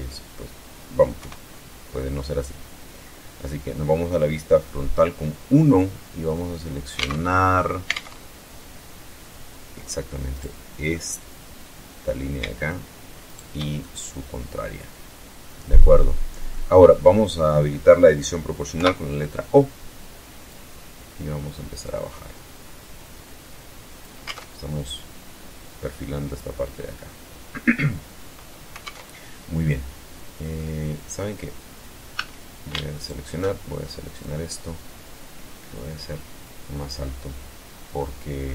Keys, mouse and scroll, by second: 0.7 KP_1, 1.4-1.9 scroll up 1, 2.0 scroll down 1, 2.5-3.0 scroll up 2, 3.5-3.9 scroll down 2, 4.7-5.0 scroll up 2, 6.5 alt+Tab, 9.8 right click, 10.3-11.7 middle drag, 12.7 shift+right click, 13.3-16.1 shift+middle drag, 18.2 o, 19.9 click, 20.7-21.1 scroll down 2, 21.3 scroll down 2, 23.7 alt+Tab, 28.3 alt+Tab, 29.1-30.1 middle drag, 29.8 click, 31.5 a, 32.4 alt+shift+right click, 33.6-36.4 drag, 36.6 scroll down 1, 37.4-38.0 middle drag, 38.1 scroll down 1.